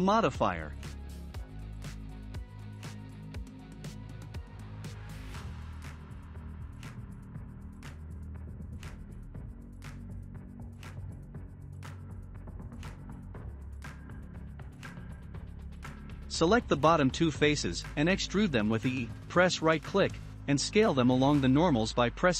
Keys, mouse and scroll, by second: 10.8-15.0 shift+middle drag, 13.1 Tab, 15.0 click, 15.6-16.7 shift+middle drag, 16.7 shift+click, 17.3-18.7 shift+middle drag, 18.7 e.